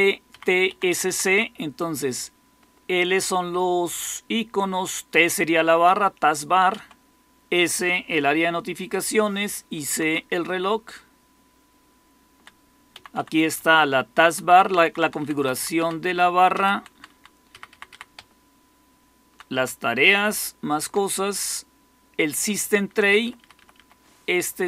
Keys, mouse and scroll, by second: 0.2 Up, 0.6 Left, 0.8 Left, 1.0 Left, 1.2 Left, 4.5 Right, 6.6 Right, 9.9 Right, 10.4 Down, 10.9 Down, 11.0-12.3 Down, 13.1 Down, 13.3-14.6 Down, 14.7 Down, 15.5 Down, 16.4 Down, 16.7 Down, 17.0 Down, 17.4 Up, 17.6 Up, 17.8 Up, 18.1 Down, 18.6-18.9 Down, 19.2 Down, 19.6-20.8 Down, 22.4 Up, 22.6 Up, 22.8 Up, 23.0 Up, 23.1 Up, 23.5 Up, 23.7 Up.